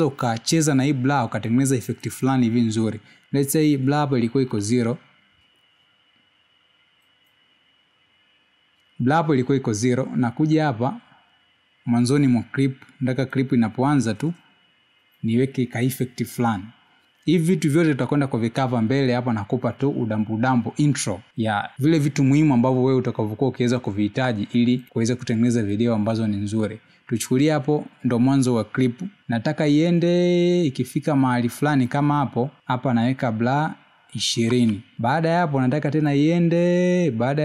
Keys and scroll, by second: 1.0 space, 7.8 0, 36.0 2.